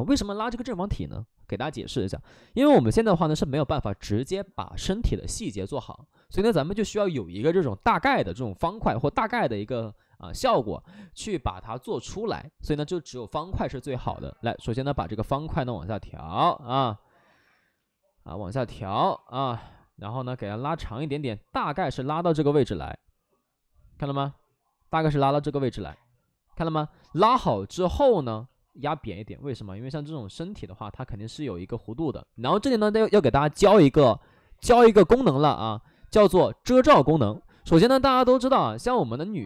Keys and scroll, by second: 14.7 w, 22.8 2, 25.4 x, 25.8 space, 27.2 space, 28.7 w, 32.1 2.